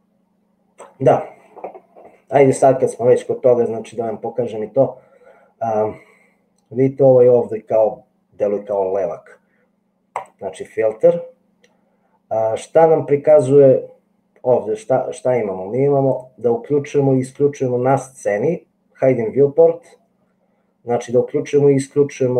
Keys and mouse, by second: 10.3-16.4 drag.